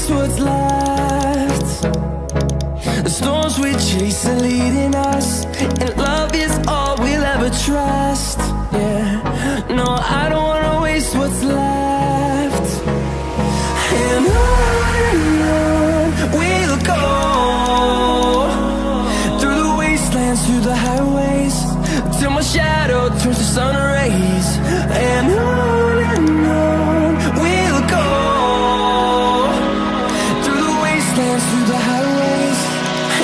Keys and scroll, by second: 27.6 ctrl+o, 31.0 ctrl+i.